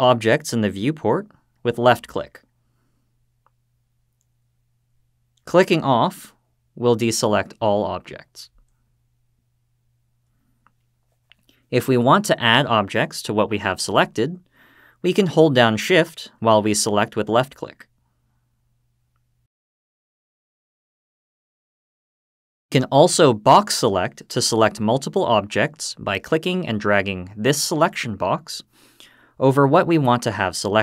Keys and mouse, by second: 4.0 click, 5.0 click, 17.1 click, 18.5 shift+click, 27.4-30.8 drag.